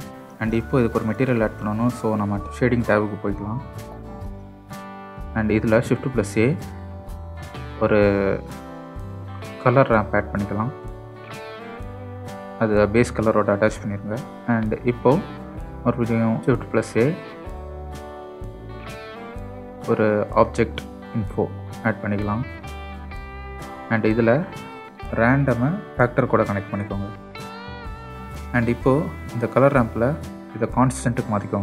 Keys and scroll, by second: 6.5 shift+a, 9.9 typing, 11.0 Return, 16.1 shift+a, 19.4-19.8 typing.